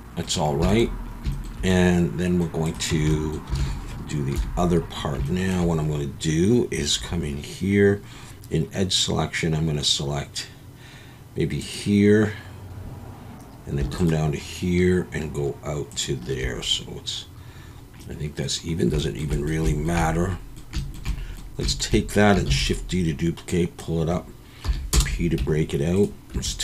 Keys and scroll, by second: 2.9 Tab, 3.5 alt+a, 4.3 KP_7, 7.0 2, 22.5 shift+d, 24.6 p, 25.4 Tab, 26.3 Tab.